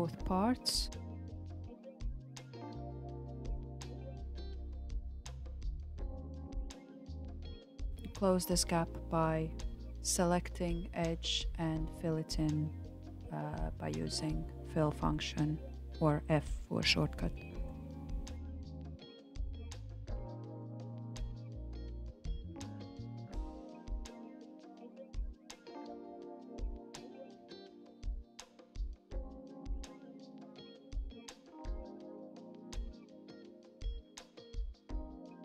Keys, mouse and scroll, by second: 5.6 click, 7.0 alt+click, 8.0 click, 11.2-13.0 drag, 13.8 shift+click, 15.9 f, 16.7-18.1 shift+middle drag, 18.1 click, 19.2 click, 20.2 shift+click, 21.4 f, 22.0-23.1 shift+middle drag, 23.1 click, 24.2 shift+click, 25.5 f, 26.0-27.6 shift+middle drag, 27.6 click, 28.6 shift+click, 29.9 f, 30.6-32.6 shift+middle drag, 32.6 click, 33.4 shift+click, 34.3 shift+click.